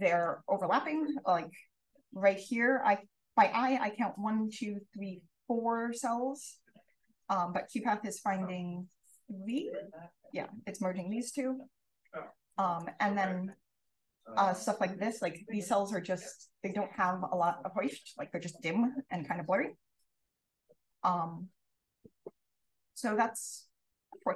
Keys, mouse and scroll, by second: 0.4 d, 1.1-5.1 scroll up 1, 1.5 click, 1.8 d, 5.1-5.8 scroll up 1, 5.8 click, 5.8-6.3 scroll up 1, 6.2 d, 7.1 d, 7.5 d, 9.4 click, 9.6 click, 9.9 click, 10.1 click, 10.1-10.9 scroll up 1, 10.9-11.2 drag, 10.9-11.6 scroll up 3, 11.4 d, 12.4 click, 13.4-13.8 drag, 17.3-17.7 drag, 18.8 d, 19.2 d, 20.3 d, 20.9 d, 21.1-24.3 scroll up 3, 21.8 d, 22.7 d, 23.1-23.5 drag, 23.7 d.